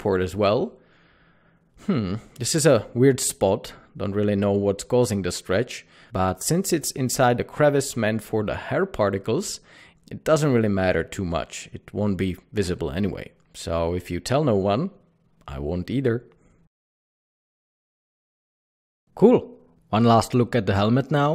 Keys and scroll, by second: 1.0 typing, 8.0 Tab.